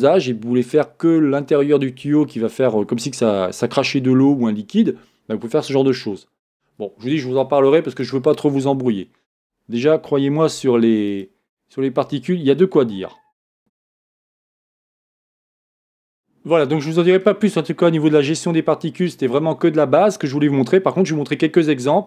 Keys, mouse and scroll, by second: 10.8 Tab, 11.3 click, 13.2-13.6 scroll down 1, 13.6-22.0 drag.